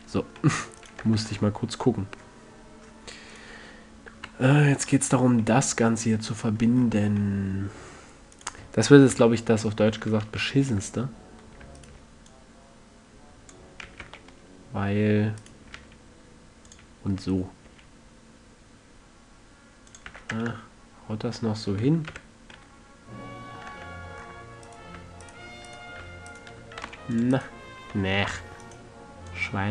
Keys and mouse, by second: 1.1-1.7 drag, 1.4 Tab, 4.5 KP_Decimal, 6.1-6.5 middle drag, 6.7 middle drag, 7.7 middle click, 9.5 middle click, 9.5 KP_1, 10.7 z, 13.9 drag, 14.3 s, 15.9-17.1 drag, 16.1 s, 17.1-17.7 middle drag, 17.7-20.9 drag, 18.0 s, 20.5 a, 20.7 Tab, 21.4 middle click, 21.5 click, 21.6-22.3 middle drag, 22.5 z, 24.1 Tab, 27.2 c, 28.3 c.